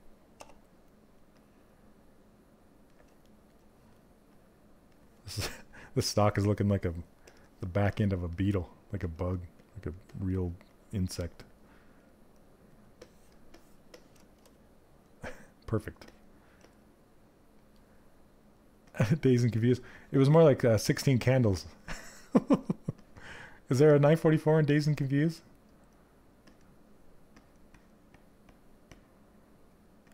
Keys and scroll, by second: 8.5 s.